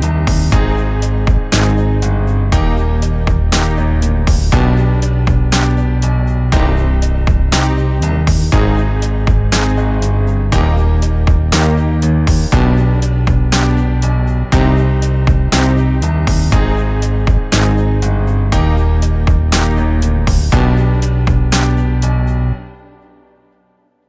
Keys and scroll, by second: 14.2 ctrl+z, 15.5 ctrl+z, 17.3 ctrl+z, 18.5 ctrl+z, 19.1 ctrl+z, 20.1 ], 20.1 ], 22.4 ], 22.9 ctrl+z.